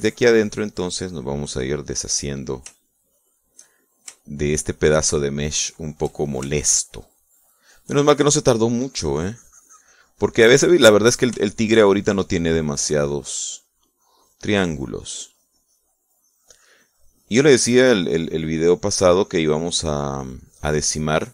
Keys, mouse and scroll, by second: 3.9 shift+middle click, 5.5 shift+middle click, 6.4 shift+middle click, 8.2 shift+middle click, 9.3-12.5 shift+drag, 12.7 shift+middle click, 13.7-21.3 shift+drag.